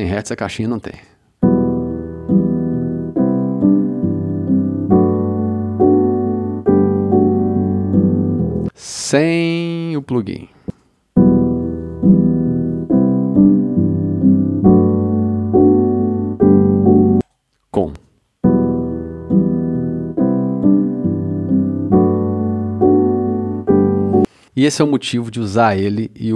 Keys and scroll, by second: 0.9 space, 8.5 space, 10.7 space, 17.1 space, 24.1 space.